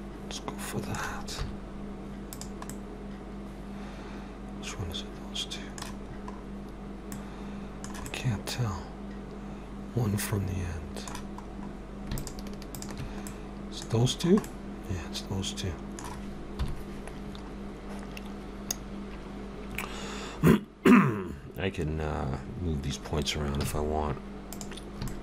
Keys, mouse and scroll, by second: 1.4 z, 2.7 middle click, 6.1 scroll up 3, 7.1 middle click, 11.5 scroll up 2, 12.2 shift+click, 13.3 middle click, 13.9 scroll down 1, 14.5 middle click, 14.5 scroll down 4.